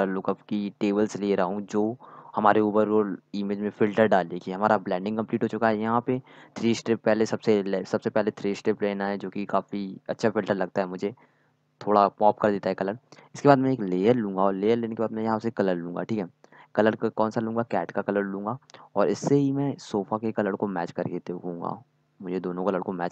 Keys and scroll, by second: 20.8 z.